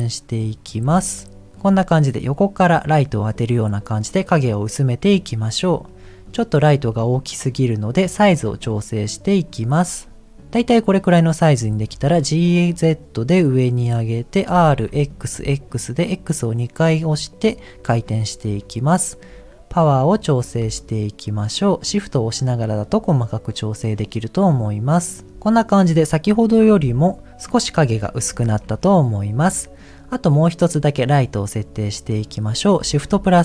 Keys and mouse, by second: 0.9 g, 5.9 middle click, 7.2 middle click, 8.6-10.4 drag, 10.4 middle click, 11.6 g, 14.4 r, 19.8 click, 20.8-25.3 drag, 21.7 t, 26.7 h, 28.5 ctrl+z.